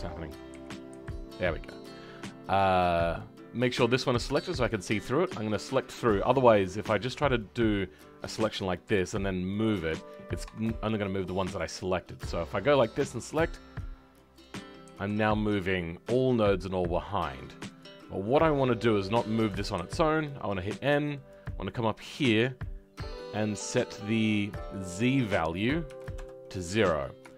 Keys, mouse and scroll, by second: 0.0 middle click, 0.5 KP_1, 4.4 shift+middle click, 5.7-27.3 middle drag.